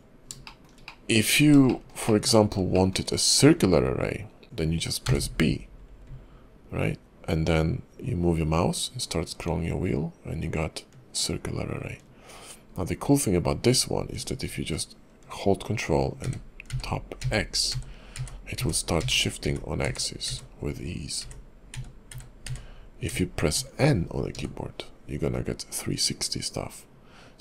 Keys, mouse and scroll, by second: 0.4 shift+middle click, 0.9 middle click, 1.2-1.6 scroll up 4, 1.7 shift+middle click, 2.0 middle click, 2.4-2.7 scroll up 3, 2.7 shift+middle click, 3.0 scroll up 2.